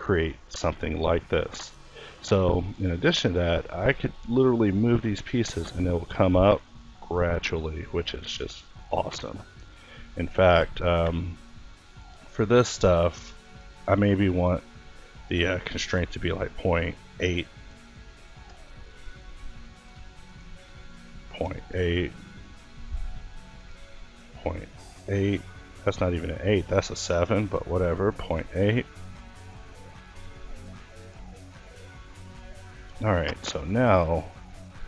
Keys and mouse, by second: 0.1 alt+s, 3.1 g, 6.4 g, 9.4 Escape, 10.4 click, 18.3 click, 20.1-23.0 drag, 24.9 middle click, 25.6-26.6 drag, 28.9-30.4 drag, 33.2 click, 33.6 g.